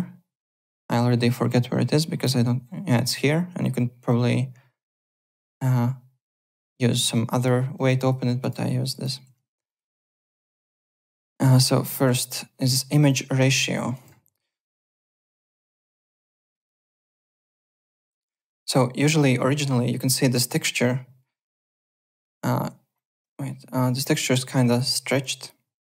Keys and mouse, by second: 8.0 click, 9.2 alt+Tab, 9.6 alt+click, 13.0 click, 14.9 click, 16.3 click, 17.1 click, 18.1 click, 21.6 click, 22.9 click, 24.0 click, 24.7 click.